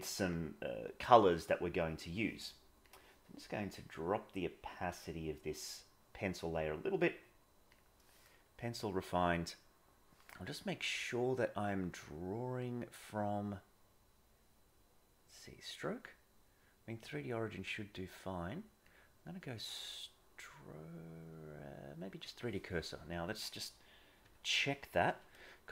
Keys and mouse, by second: 3.9-7.1 drag, 12.7-22.5 drag, 24.2 KP_1, 25.3-25.7 shift+middle drag.